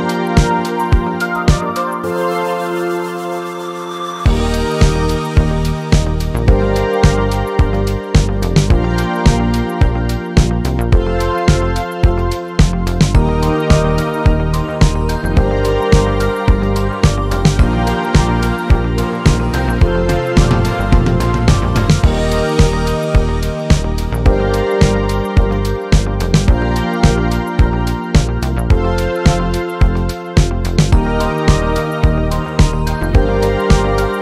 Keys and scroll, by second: 14.8 typing.